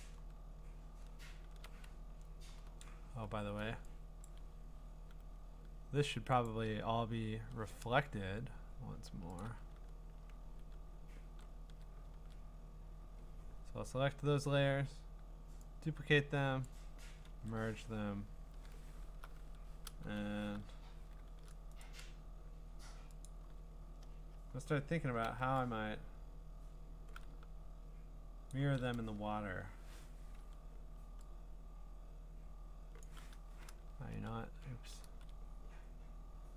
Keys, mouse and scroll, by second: 0.9-2.5 scroll, 3.1 b, 4.2 b, 4.3 click, 4.3 b, 4.4 click, 6.5 click, 6.9-7.6 scroll, 7.6 scroll down 3, 8.1-8.7 scroll down 3, 8.7 scroll up 1, 9.4 shift+click, 11.3 ctrl+e, 11.3 shift+click, 12.2 ctrl+z, 13.5-14.0 scroll up 4, 14.0-14.6 scroll, 16.6 click, 17.3 ctrl+e, 18.3-19.3 scroll, 19.3-20.1 scroll, 20.5 ctrl+r, 21.3 ctrl+t, 21.8 right click, 23.3 click, 25.4 b, 28.5 shift+click, 29.1 3, 30.0 Return, 30.4 ▯, 32.8 ▯, 33.0 click, 33.7 ctrl+z, 34.1 ctrl+z, 35.0 ctrl+z, 35.8-36.5 scroll.